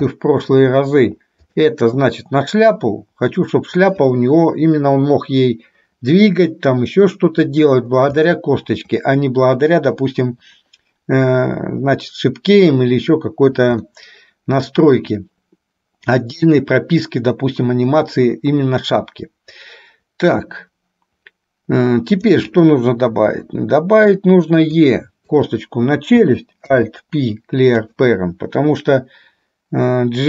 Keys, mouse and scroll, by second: 0.4 shift+middle click, 2.6-3.9 drag, 8.4 shift+middle click, 14.0-15.3 shift+middle drag, 22.3 click, 23.5 e, 25.3 click, 26.8 alt+p.